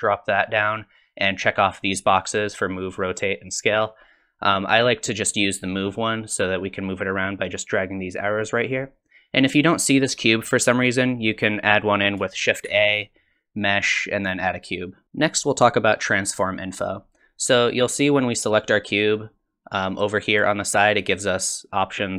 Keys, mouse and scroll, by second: 6.7 click, 12.7 shift+a, 17.4 click, 18.9 click.